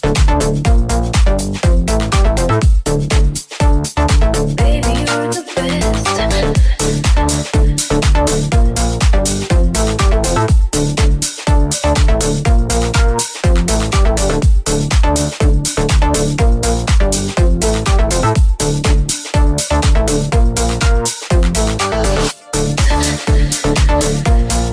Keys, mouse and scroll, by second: 19.9 middle click, 20.7 middle click, 21.1-24.7 middle drag.